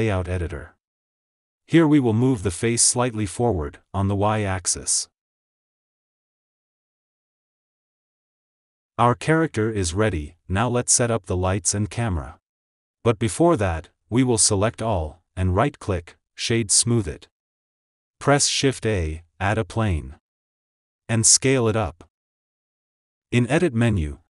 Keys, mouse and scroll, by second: 0.0 click, 0.6-1.0 scroll down 2, 1.0-2.1 shift+middle drag, 2.1-2.4 scroll up 3, 2.4 g, 7.7 KP_1, 8.6 click, 8.9-9.2 scroll down 2, 9.2 scroll up 2, 14.6 a, 17.0-17.7 right drag, 17.7 ctrl+z, 20.4 shift+a, 21.1 s, 22.8 click, 24.0 Tab.